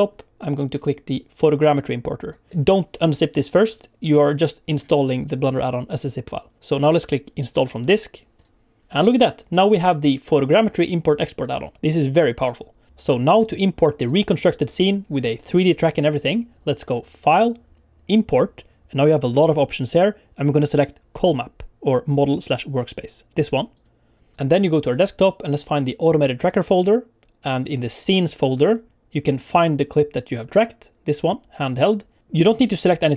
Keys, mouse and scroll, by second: 16.9 click.